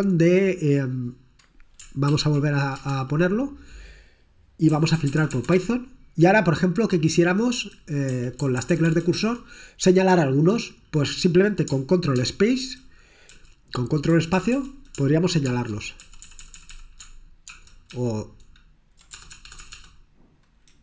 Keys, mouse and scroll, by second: 0.4-0.7 scroll down 2, 1.0 click, 2.2 ctrl+p, 2.8 Return, 4.6-6.1 typing, 8.2 Down, 8.6 Down, 8.8 Down, 8.9 Down, 9.0 Down, 9.2 Down, 9.9 Down, 12.3 ctrl+space, 13.3 Down, 14.1 Down, 14.4 Down, 14.5 Down, 15.5 ctrl+space, 16.1 Down, 16.2 Down, 16.4 Down, 16.6 Down, 16.7 Down, 17.5 ctrl+space, 18.1 ctrl+Down, 19.3-19.8 typing.